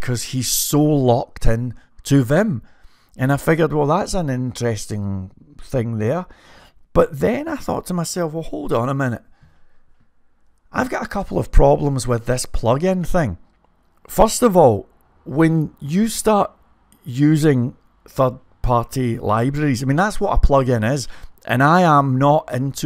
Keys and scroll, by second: 9.7 typing.